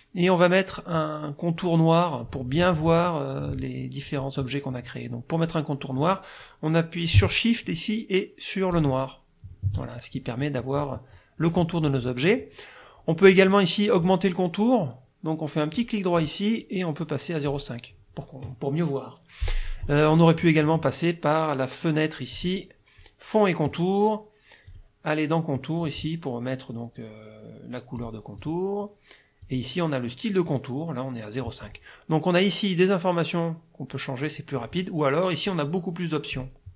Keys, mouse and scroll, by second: 8.8 shift+click, 14.1 click, 15.8 click, 16.2 click, 17.5 click, 22.3 click, 24.7 click, 28.0 click, 28.4 click, 29.5 click, 36.4 click.